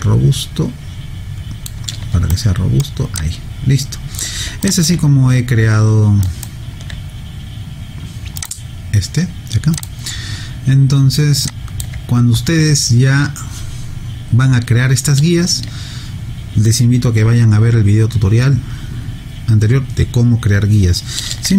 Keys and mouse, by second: 2.3 alt+right click, 3.2 alt+click, 4.6 alt+click, 6.3 alt+right click, 8.4 click, 11.5 alt+click.